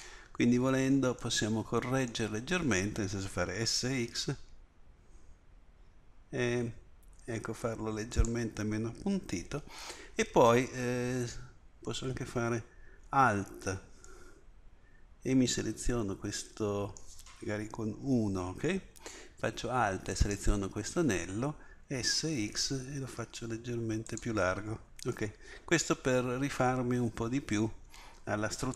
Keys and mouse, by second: 3.6 s, 17.9 KP_1, 21.8 s.